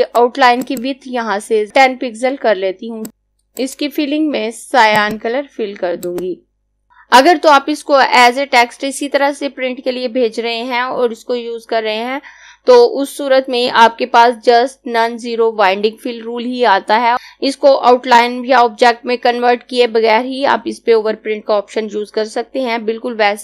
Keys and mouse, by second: 3.6 click.